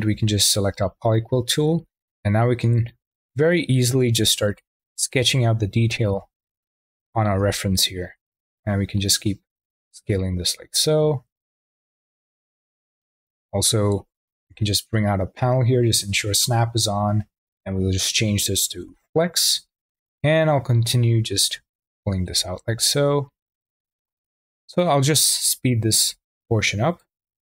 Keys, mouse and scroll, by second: 0.1 q, 2.7 drag, 3.7 click, 4.4 drag, 5.1 click, 6.1-7.4 drag, 8.9 click, 12.3-14.4 drag, 14.4 n, 17.5 click, 18.7 n, 19.6 click, 21.3 click, 23.2 drag, 25.9 click.